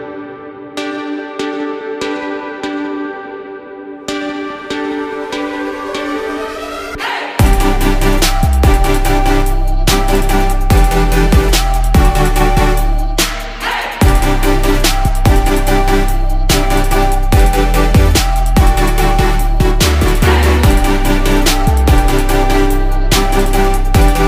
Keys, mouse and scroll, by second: 0.8 right click, 1.9 ctrl+z, 3.1 ctrl+z, 6.3 ctrl+z.